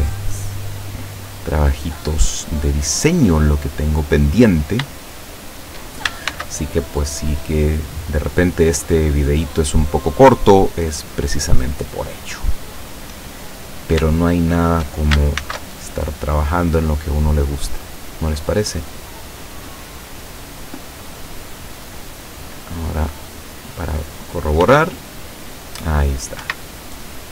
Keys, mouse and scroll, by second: 0.8 click, 1.5 click, 1.8 middle click, 2.3 click, 2.7-4.4 middle drag, 4.4 right click, 5.4 shift+right click, 6.3 ctrl+shift+c, 6.9 ctrl+shift+click, 8.0 click, 8.5 click, 8.9 click, 9.6 click, 10.1 click, 11.2 click, 11.8 click, 12.5 click, 13.6 right click, 14.6 shift+right click, 15.5 ctrl+shift+c, 15.9 ctrl+shift+click, 17.0 click, 17.3 click, 17.9 click, 18.6 click, 19.0 click, 19.4 click, 20.3 click, 21.0 click, 21.8 click, 23.1 right click, 24.7 r, 26.5 Escape, 27.1-27.3 scroll down 2.